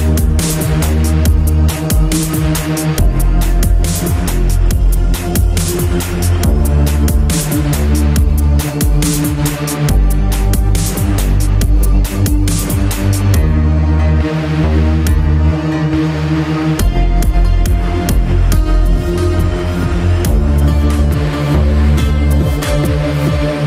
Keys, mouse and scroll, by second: 4.5 middle click, 6.7 click, 7.9 click, 10.6 click, 12.2 click, 12.9 click, 13.0 click, 13.1 click, 18.2 click, 20.9 click, 22.6 click, 22.6 click, 22.8 double click.